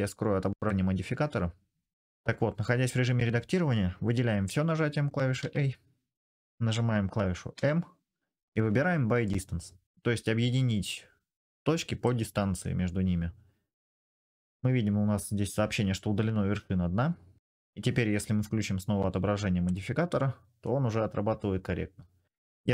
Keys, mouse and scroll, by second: 0.5-6.2 middle drag, 5.2 a, 7.3 m, 12.4-13.5 middle drag, 16.3-17.4 middle drag, 17.4-19.5 drag, 19.5 middle click, 20.5 middle click.